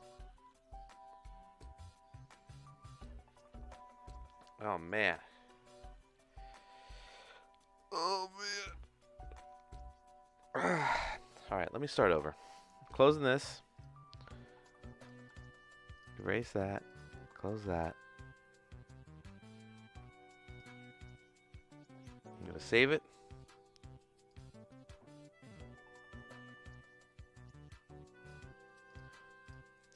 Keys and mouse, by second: 0.0-8.0 middle drag, 13.7 shift+click, 15.2 x, 15.9 click, 16.9 shift+click, 17.6 ctrl+s, 20.4-22.9 drag, 23.4 click, 24.3-28.4 drag, 28.9 click.